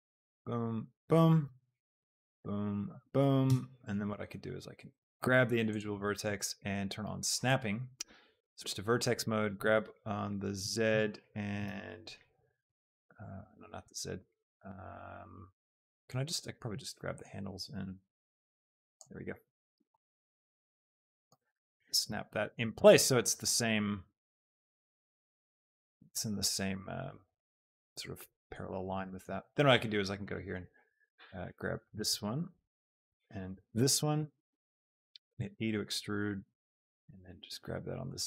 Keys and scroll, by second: 9.7 z, 12.6 Tab, 35.0 shift+e, 35.4 Escape.